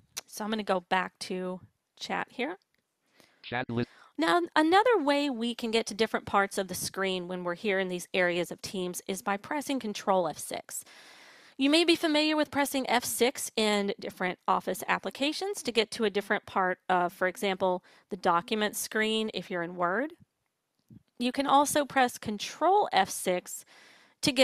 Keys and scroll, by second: 9.4 ctrl+F6.